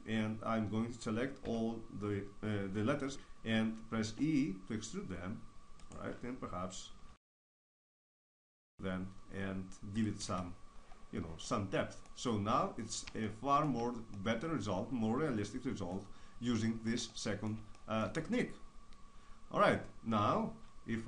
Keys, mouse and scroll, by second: 1.4 a, 4.0 e, 5.8-8.1 right drag, 7.0 alt+s, 8.1 middle click, 10.1 click, 10.2 Tab.